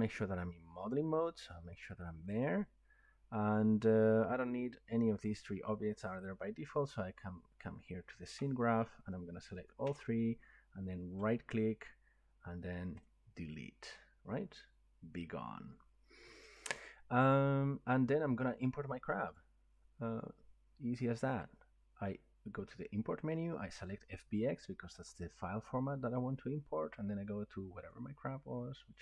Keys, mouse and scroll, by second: 0.9 click, 8.4-9.2 drag, 9.4 ctrl+click, 11.5-13.1 right drag, 13.1 click, 19.3 click, 25.0 click, 27.9 click.